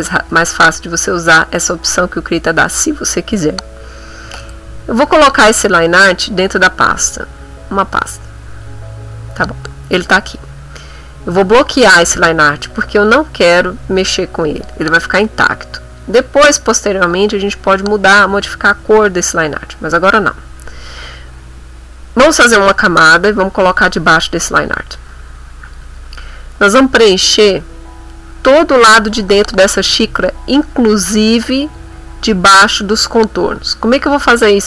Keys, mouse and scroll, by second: 0.3 ctrl+z, 4.4-7.4 drag, 8.2 click, 22.6 click, 23.7 click, 24.4 middle click, 25.1 shift+click.